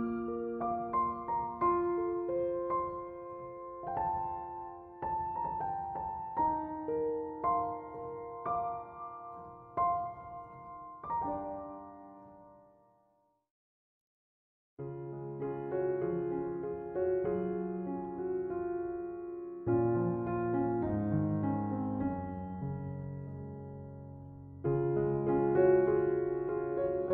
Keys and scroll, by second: 10.2-11.6 typing, 20.7-21.7 typing, 24.3-25.6 typing.